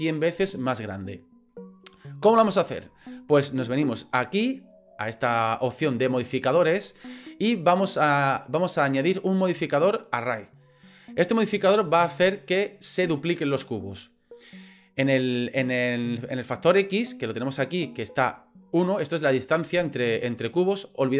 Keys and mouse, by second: 2.5 shift+middle drag, 6.8 click, 7.9 click, 9.1-10.6 drag, 12.2-12.7 middle drag, 19.1-20.7 drag.